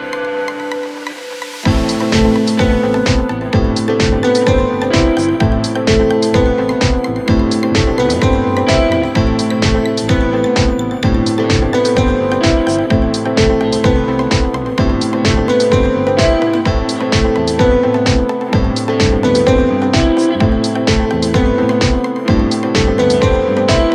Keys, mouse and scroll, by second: 5.3 click, 6.1-6.4 super+scroll down 1, 7.5-8.2 alt+scroll down 2, 8.2-8.6 alt+scroll down 1, 8.6 scroll up 2, 8.9 click, 9.2-9.6 shift+click, 9.7-10.8 alt+scroll down 2, 10.8-11.1 alt+scroll down 1, 11.1 alt+scroll up 1, 11.4 space, 11.6 click, 11.8-12.1 space, 12.7-18.5 drag, 19.1-19.7 alt+scroll up 1, 20.4 click, 23.3-23.9 drag.